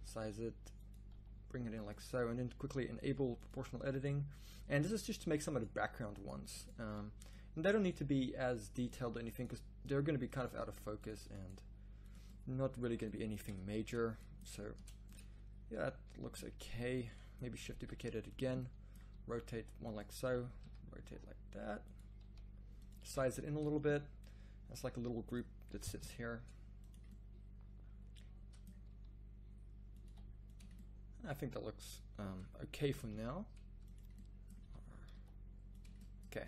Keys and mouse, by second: 0.0 s, 1.1 g, 3.0-3.5 drag, 4.6 g, 6.8 g, 8.0 g, 9.4 g, 10.5 g, 11.6 g, 14.8 Tab, 17.7 shift+d, 19.1 r, 20.2 r, 22.2 r, 23.1 s, 25.7 r, 28.9 r, 30.0 g, 32.8 r, 34.5 r, 36.3 a.